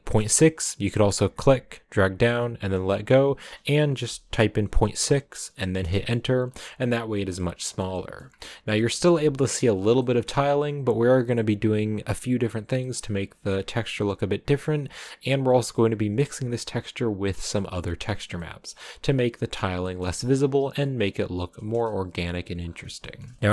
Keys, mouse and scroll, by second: 6.5 scroll down 3, 6.7-7.8 middle drag, 7.8-8.8 scroll up 3, 7.9 middle click, 8.8-9.3 scroll up 1, 9.3 middle click, 9.8-10.8 scroll down 4, 9.9 middle click, 12.7-15.4 middle drag, 15.4-15.8 scroll up 2, 18.3 middle click, 19.1-19.6 scroll up 2, 19.6 scroll down 3, 19.6-20.7 middle drag, 20.7 KP_1, 21.7 KP_0, 22.5-22.9 scroll down 7, 23.1-23.5 shift+middle drag.